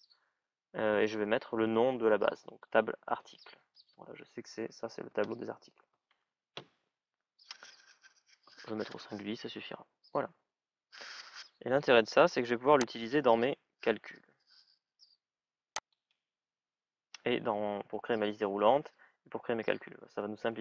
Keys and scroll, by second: 8.7 Return.